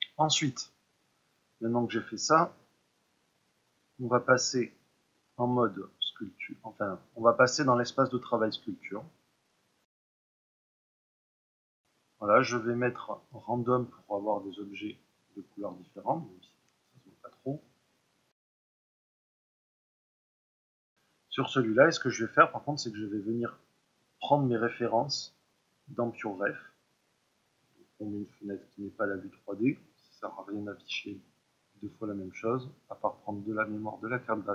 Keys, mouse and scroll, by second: 9.5 click, 10.3 click, 10.7-13.3 ctrl+middle drag, 13.3 click, 14.1-19.1 middle drag, 19.1-20.5 drag, 20.5-22.9 ctrl+middle drag, 22.9-34.5 drag.